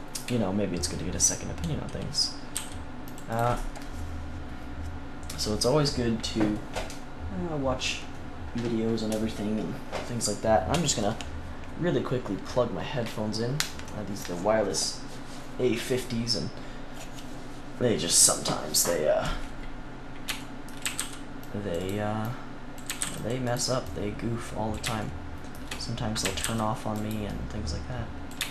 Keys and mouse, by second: 2.5 c, 3.3-5.7 right drag, 19.5-21.8 middle drag, 20.8 a, 20.9 c, 21.8-22.8 drag, 22.2 right click, 22.8-24.1 middle drag, 22.8 a, 22.9 c, 24.9 click, 26.2 a, 26.4 c, 26.9-28.4 drag, 28.4 right click.